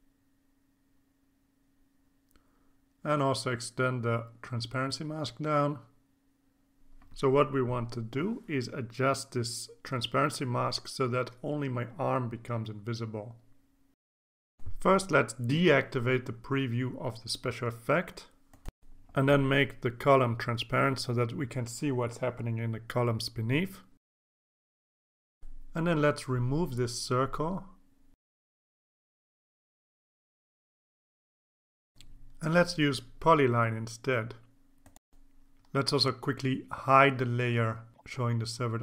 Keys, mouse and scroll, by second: 1.1 scroll up 2, 2.4 click, 3.2-8.2 drag, 8.9 click, 16.1 ctrl+s, 17.5 click, 19.8 click, 21.4-22.4 drag, 25.5 click, 26.8 click, 27.8-28.1 scroll up 1, 28.6-29.9 drag, 30.1 Delete, 31.4 click, 32.3 click, 34.6 click, 35.6 scroll up 1, 36.5 click, 38.6 click.